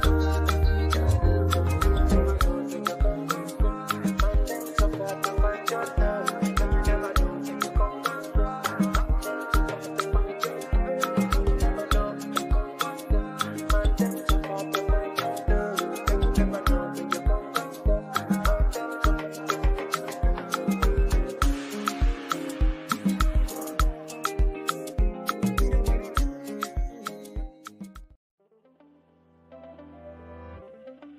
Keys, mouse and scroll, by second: 1.1 ctrl+v, 2.8 click, 4.6 v, 6.3 ctrl+a, 7.3 click, 10.0 ctrl+d, 10.8-13.4 shift+drag, 18.1 click, 18.2-23.4 drag, 23.4 ctrl+c, 24.4 click, 26.3 ctrl+v, 27.4-30.7 drag.